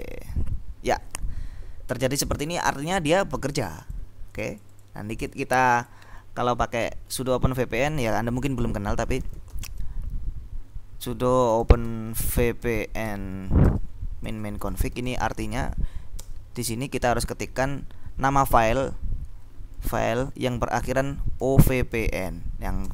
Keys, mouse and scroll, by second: 0.0-0.4 typing, 2.3-3.4 drag, 3.7 click, 4.6-6.4 drag, 8.9-10.1 typing, 11.3-13.2 typing, 14.3-16.4 typing, 19.6-22.9 typing.